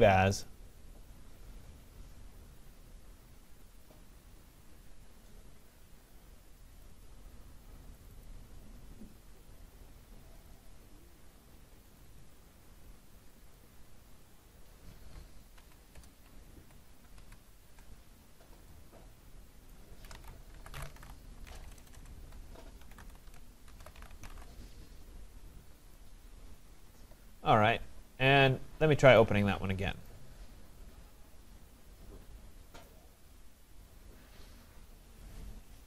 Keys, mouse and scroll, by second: 0.5 click, 3.7 click, 6.9 click, 7.1 click, 8.1 click, 8.7 click, 10.5 click, 10.7 click, 12.0 click, 12.3 click, 13.6 click, 14.3 click, 15.6 Right, 16.0 BackSpace, 16.6 BackSpace, 17.2 Down, 19.7 click, 19.9-24.9 typing, 29.0-29.8 typing, 29.3 click, 30.1 click.